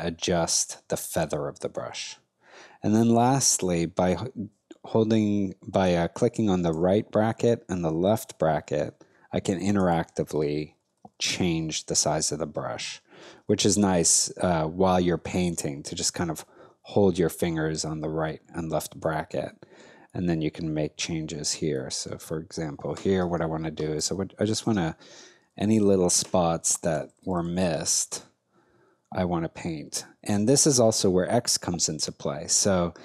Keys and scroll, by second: 6.7 ], 7.7 [, 9.3 ], 10.5 [, 12.5 ], 13.0 [, 15.3 [, 15.9 ], 16.2 [, 24.0 space, 26.6 [.